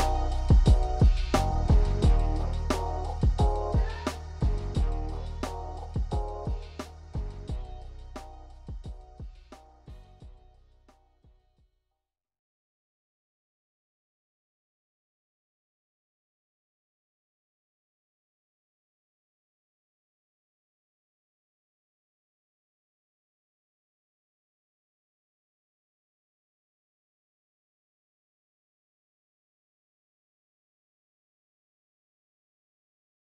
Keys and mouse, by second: 0.8 click, 2.3-14.0 drag, 14.0-16.4 shift+middle drag, 16.4-20.3 drag, 20.3-23.1 middle drag, 23.1 Tab, 23.7 Left, 24.7 2, 25.2 Left, 26.1 3, 26.4 click, 27.5-29.4 middle drag, 29.4 click, 30.6-33.3 drag.